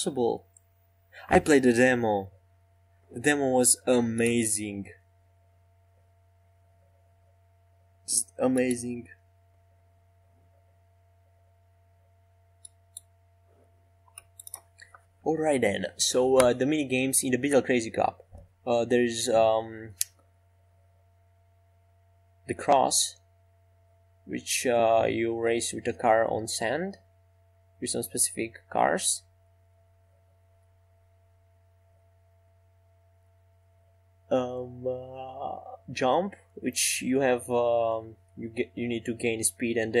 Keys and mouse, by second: 11.2-18.0 middle drag, 29.5 e, 32.2 middle click, 33.1 Tab, 37.0-40.0 drag.